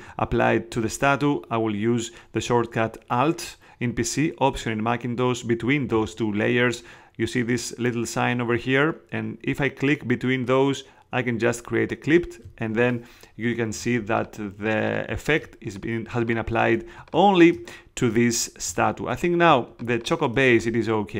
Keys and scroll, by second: 13.7 space, 18.6 space.